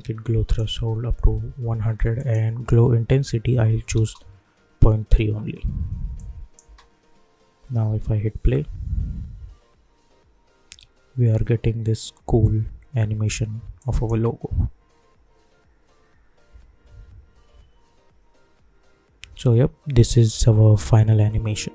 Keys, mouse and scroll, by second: 3.9 Return, 6.1 click, 6.6 space, 13.7 click, 14.0 space.